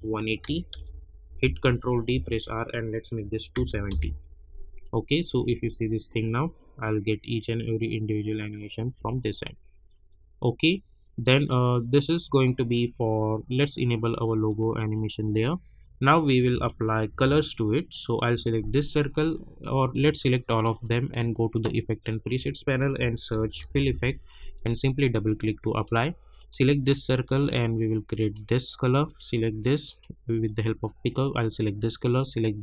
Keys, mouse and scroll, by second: 0.7 Return, 1.6 ctrl+d, 2.1 r, 2.6 click, 3.9 Return, 4.8 click, 5.3 space, 8.8 space, 10.1-14.3 drag, 17.0 u, 18.0 click, 20.5 shift+click, 21.6 click, 22.7-24.3 typing, 24.5 click.